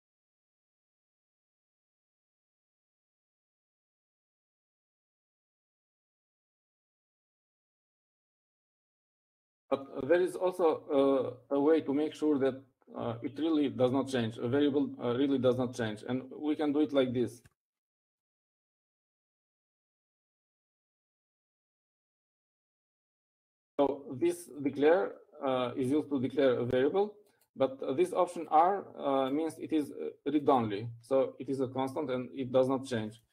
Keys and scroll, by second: 1.2 Down, 2.3 Up, 2.7 Up, 20.1-23.7 typing.